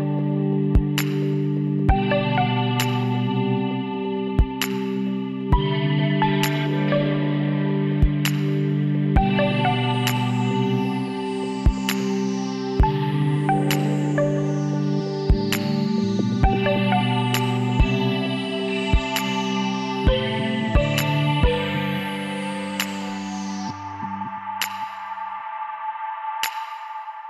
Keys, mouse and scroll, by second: 6.3-18.6 drag, 18.6-19.9 middle drag, 19.9 KP_Divide, 22.9 n, 23.5-25.0 middle drag, 26.2-27.2 middle drag, 26.6 Tab.